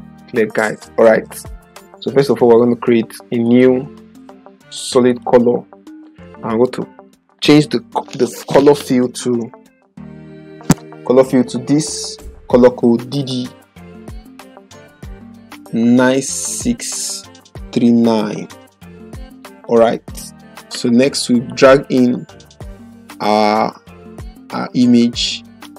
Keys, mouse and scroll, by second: 3.4 click, 12.9 d, 13.1 d, 16.0-18.3 typing, 19.5-25.6 drag.